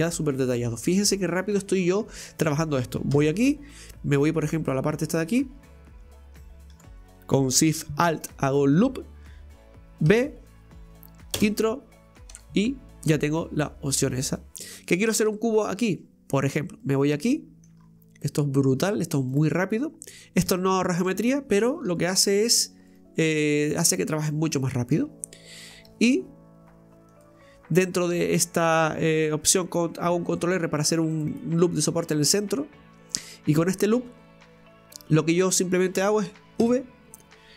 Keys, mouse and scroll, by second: 3.2 Tab, 5.2 right click, 7.0 right click, 8.1 alt+shift+right click, 8.3 alt+shift+right click, 10.2 v, 12.9-13.2 scroll down 1, 13.2-15.3 middle drag, 15.3 Tab, 16.8 right click, 17.3 middle click, 17.8-18.2 scroll up 1, 18.2-19.3 middle drag, 19.3 click, 20.1 right click, 20.5 shift+right click, 21.6 right click, 22.0 shift+right click, 22.4 shift+right click, 22.9 shift+right click, 23.2 shift+right click, 23.5 shift+right click, 24.2 shift+right click, 24.7 shift+right click.